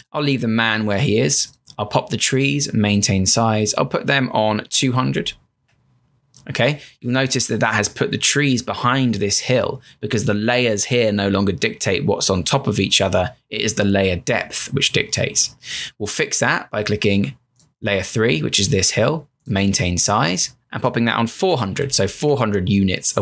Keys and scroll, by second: 4.4-5.5 typing, 21.2-22.4 typing.